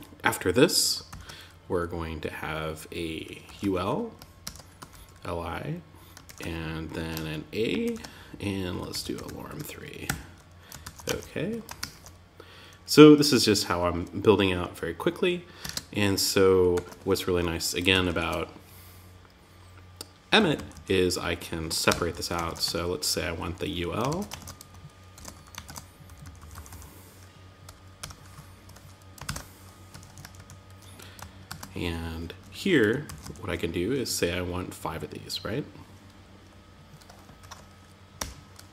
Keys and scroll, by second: 3.8 shift+., 5.6 shift+., 7.2 shift+., 9.4 Tab, 10.2 super+s, 10.4 super+Tab, 11.1 super+r, 15.0 super+Tab, 16.1 super+z, 17.3 alt+Left, 19.7 Left, 21.2 Return, 21.5 Up, 21.8 super+Right, 22.0 Tab, 22.8 Down, 23.4 super+Left, 23.7 shift+super+Right, 24.5 super+x, 24.7 Up, 25.0 super+Right, 25.4 Left, 27.4 Return, 28.6 shift+super+t, 29.3 Tab, 30.8 super+v, 32.4 alt+Left, 36.8 shift+8.